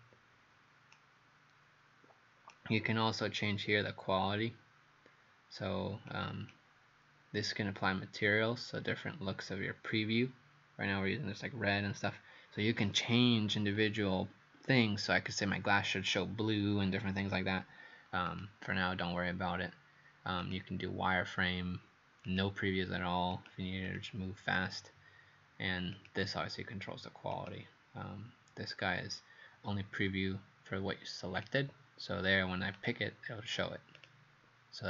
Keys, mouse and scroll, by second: 1.0 right click, 6.1 click, 21.7 click, 23.9 click, 26.0 click.